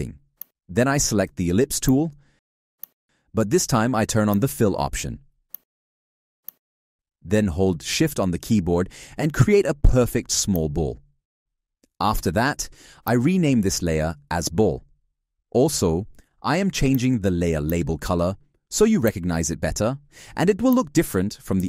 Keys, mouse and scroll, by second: 8.6 shift+click, 10.7 shift+click.